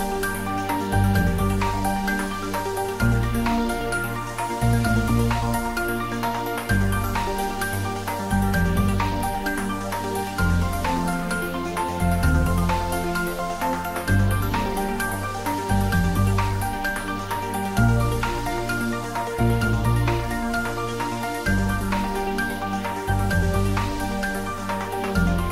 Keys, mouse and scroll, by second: 1.0 e, 2.9 click, 3.2 scroll down 1, 3.7-5.5 middle drag, 5.7-6.5 scroll down 1, 7.8-9.0 middle drag, 9.8 ctrl+z, 10.8 shift+click, 12.7-13.2 middle drag, 14.1 click, 15.5 r, 16.1 click, 16.7 ctrl+z, 17.5 e, 19.4 click, 19.7-21.6 scroll down 1, 23.1 e.